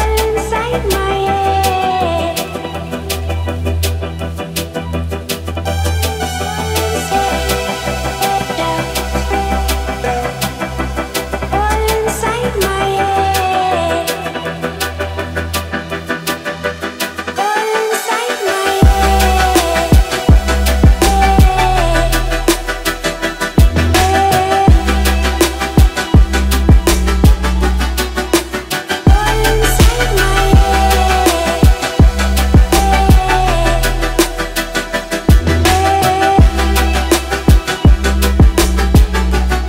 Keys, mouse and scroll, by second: 0.0-0.8 typing, 1.6 Down, 1.9 Return, 3.5 click, 6.8 scroll up 1, 7.9 click, 11.8-15.7 drag, 19.8 scroll down 1, 21.4 click, 22.2 scroll up 1, 23.7-27.5 drag, 27.8-28.7 middle drag, 29.9-33.8 drag, 38.6-39.4 scroll down 1.